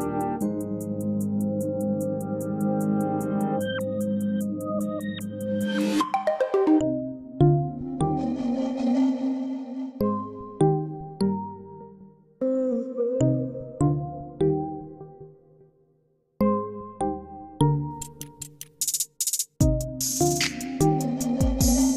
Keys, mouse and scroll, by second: 1.0-1.5 scroll down 3, 1.5 click, 2.6 click, 5.2-8.2 drag, 9.1-14.1 drag, 14.5-15.5 scroll up 12, 15.5-18.5 middle drag, 18.9 ctrl+t.